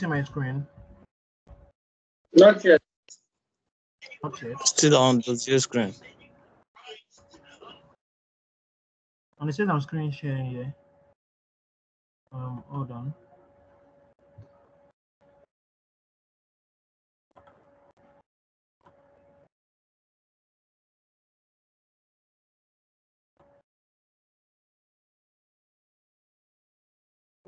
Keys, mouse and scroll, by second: 0.4 ctrl+z, 0.7 ctrl+z, 3.3 click.